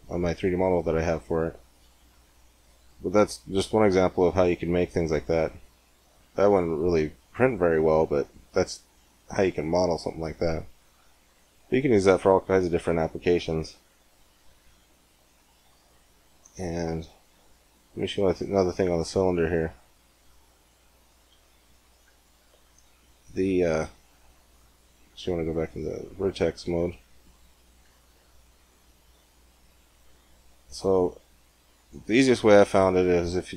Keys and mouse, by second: 4.6 click, 7.1-13.5 drag, 13.5 Tab, 14.3 Tab, 15.2 x, 16.5 shift+a, 19.2-21.7 drag, 21.7 middle click, 22.4 Tab, 23.5-24.7 drag, 24.7 right click, 25.6-27.5 drag, 27.0-29.6 right drag.